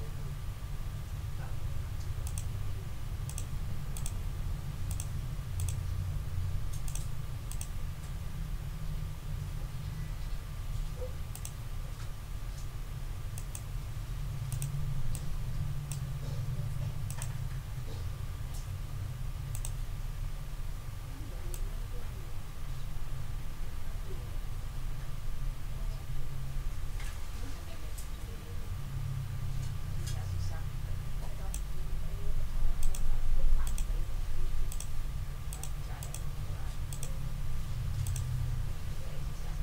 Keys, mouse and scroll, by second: 2.2 click, 3.2 click, 3.9 click, 4.9 click, 5.5 click, 6.8 click, 7.5 click, 11.3 click, 13.3 click, 14.5 click, 15.1 click, 17.0 click, 19.5 click, 21.5-31.7 drag, 32.8 click, 33.6 click, 34.7 click, 35.5 click, 36.0 click, 36.9 click, 38.0 click.